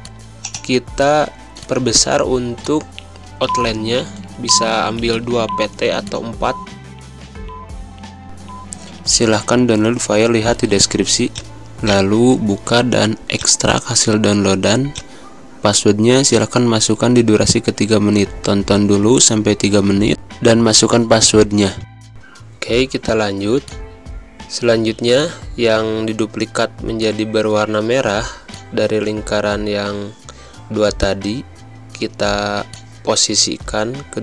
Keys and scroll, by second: 0.8 z, 1.4 space, 2.0 v, 4.1 ctrl+c, 26.8 z, 27.3 space, 27.9 v.